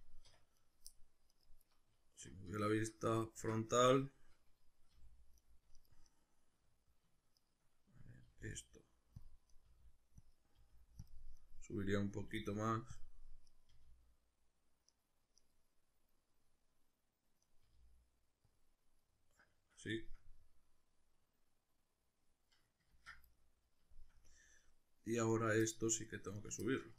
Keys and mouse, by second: 0.3 1, 0.6 right click, 0.9 middle click, 1.3 right click, 2.1 alt+q, 2.7-5.5 shift+middle drag, 3.2 alt+q, 4.9 g, 5.8 shift+right click, 6.1 shift+right click, 7.4 shift+right click, 8.3 g, 9.3 click, 9.5 right click, 9.7 g, 10.3 click, 10.6 g, 11.1 click, 11.4 right click, 12.2 g, 13.0 click, 13.5 right click, 13.7 g, 15.4 right click, 17.5 right click, 17.7 g, 18.6 click, 19.1-25.3 middle drag, 22.9 ctrl+z, 25.3 right click, 25.6 middle click, 26.4 right click, 26.6-26.9 shift+middle drag.